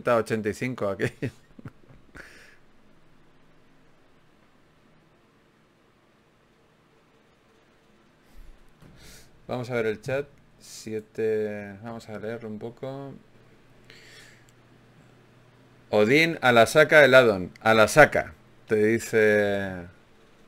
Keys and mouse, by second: 2.6-4.2 right drag, 4.2 g, 4.6 click, 5.2 right click, 5.8 f, 6.2 ctrl+Tab, 11.6 ctrl+Tab, 14.9 f, 15.7 ctrl+z, 16.3 ctrl+Tab, 17.2 click, 18.0 g, 20.3-20.4 drag.